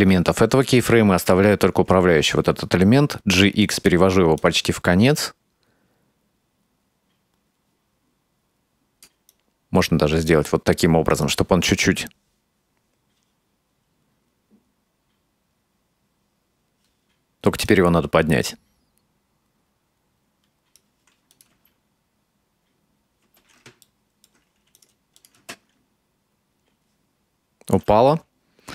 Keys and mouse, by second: 2.2 g, 4.4-9.1 drag, 9.3-10.6 right drag, 10.8-14.8 drag, 14.8 space, 16.0 space, 16.1-17.1 drag, 17.7-20.8 right drag, 21.4 click, 21.6 space, 23.3 space, 23.9 ctrl+middle click, 24.8 right click, 25.2 click, 25.4 space, 27.8 space.